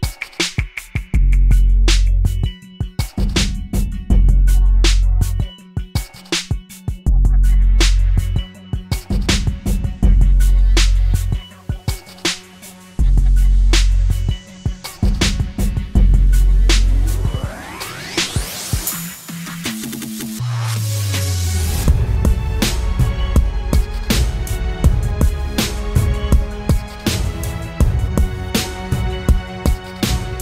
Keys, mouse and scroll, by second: 2.6 e, 28.9 double click.